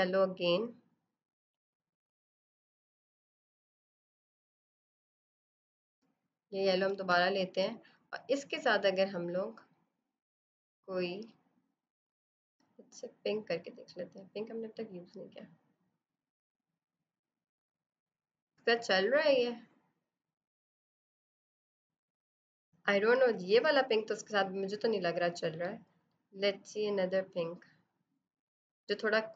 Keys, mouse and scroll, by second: 1.3 b, 2.0 alt+click, 7.4 click, 24.7 click.